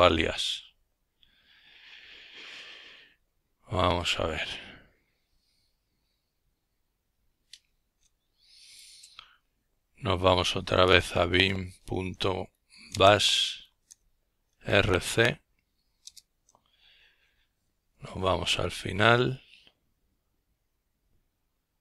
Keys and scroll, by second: 6.3-10.8 typing, 11.9 Return, 14.0-16.4 typing.